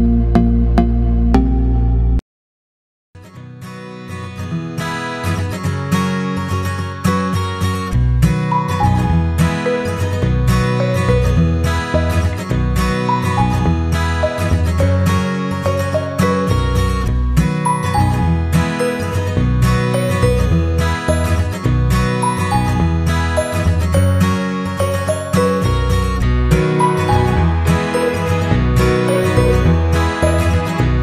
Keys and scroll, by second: 24.1 Left.